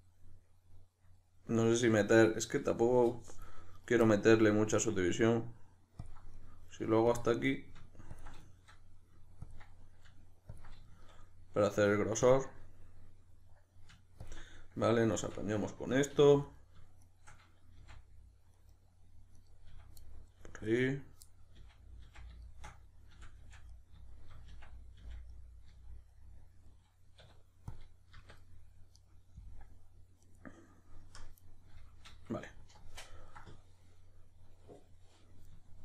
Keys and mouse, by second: 3.8 right drag, 4.0-6.0 middle drag, 6.0 ctrl+click, 6.4-7.1 middle drag, 7.1 ctrl+click, 7.4-8.1 middle drag, 8.1-8.5 ctrl+drag, 8.5-9.4 shift+middle drag, 9.4 ctrl+drag, 9.7-12.2 middle drag, 10.6 ctrl+click, 12.2 ctrl+drag, 12.5-14.2 middle drag, 14.2 ctrl+click, 14.5-16.4 middle drag, 16.1 2, 16.4 right click, 17.0 shift+right click, 17.8 f, 18.6 right click, 19.4 right click, 19.7 f, 20.0-20.7 middle drag, 20.7 right click, 21.2-28.9 middle drag, 21.5 f, 23.1 f, 24.5 f, 25.7 z, 27.2 q, 28.9 right click, 30.2 right click, 31.0 KP_Decimal, 31.4-35.8 middle drag.